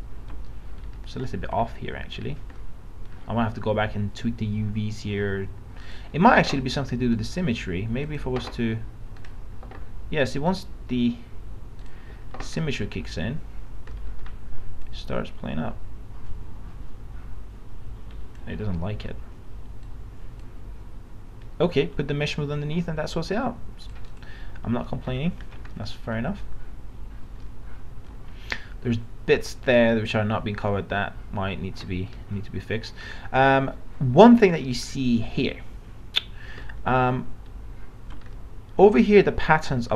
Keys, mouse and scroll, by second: 0.8 scroll up 1, 5.9 click, 12.6 middle click, 12.8 scroll down 1, 14.0 middle click, 14.9-18.5 drag, 18.6 ctrl+z, 19.9 click, 24.9 middle click, 25.0 scroll up 1, 25.7 middle click, 26.6 scroll down 1, 27.5 alt+middle click, 30.7 alt+middle click, 36.6 alt+middle click.